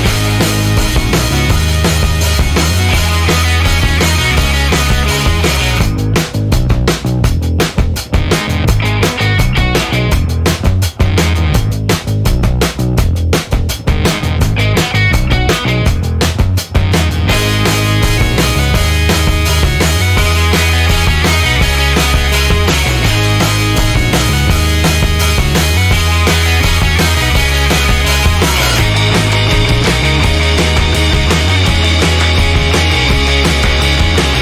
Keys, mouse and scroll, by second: 0.4 click, 2.1 click, 4.5 click, 7.6 F2, 8.4-12.2 typing, 14.0-15.0 typing, 15.7 click, 16.8-18.1 drag, 18.7-19.5 drag, 20.0-20.9 drag, 21.3 click, 22.4 click, 23.1 click, 24.6 click, 25.2 click, 26.7 click, 31.4-33.3 drag, 34.3 scroll up 1.